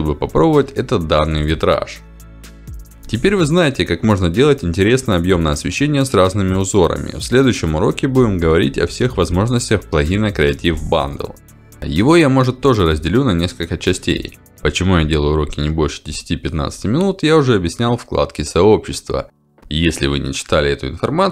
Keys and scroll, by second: 6.3 2, 6.8 0, 7.5 Return, 10.1 5, 10.5 0, 10.9 Return.